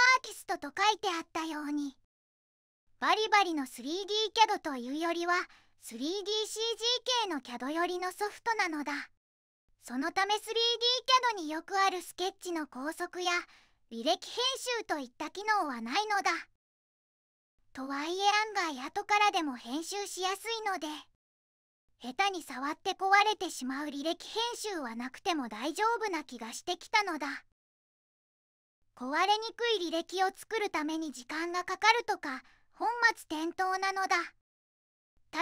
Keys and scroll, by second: 2.5-3.0 typing, 2.7 Tab, 3.3 Return, 3.4 Return, 8.6-9.1 typing, 8.8 Tab, 9.2 Return, 9.4 Return, 14.1 c, 14.9 Escape, 21.4 3, 23.5 -, 24.3 2, 24.4 0, 24.6 Return, 28.9 2, 31.0-32.3 typing, 31.2 Tab, 32.2 Tab, 32.4 Tab, 33.6 Return.